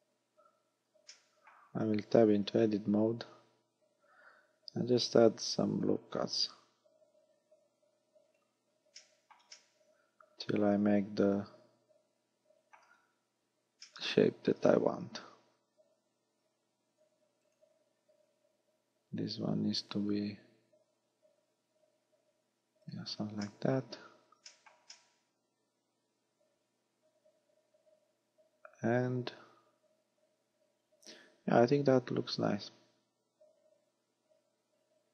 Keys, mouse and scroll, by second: 0.1 scroll down 3, 1.1 middle click, 2.7 Tab, 4.8 ctrl+r, 8.4 click, 9.1 shift+middle click, 9.6 middle click, 13.1-13.9 scroll up 4, 13.9 middle click, 15.5 ctrl+r, 22.9 click, 23.5 shift+middle click, 23.9-24.5 scroll down 3, 24.5 shift+middle click, 25.0 middle click.